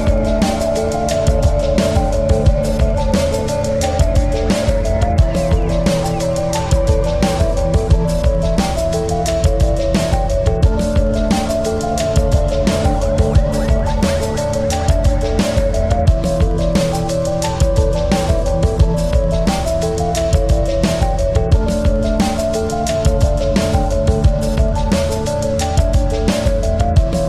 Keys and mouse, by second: 1.0 click, 1.2 ctrl+-, 2.6 space, 3.3 click, 3.5 space, 5.1 click, 7.6 space, 7.9 click, 8.2 space, 8.4 click, 8.6 space, 9.5 space, 10.9 click, 12.4 click, 13.9 space, 14.1 click, 14.5 space, 15.7 click, 16.3 space, 16.5 click, 16.9 space, 18.0 click, 18.6 space, 18.9 click, 19.2 space, 20.0-22.9 drag, 22.9-25.3 alt+drag, 26.3 ctrl+c, 26.8 ctrl+f.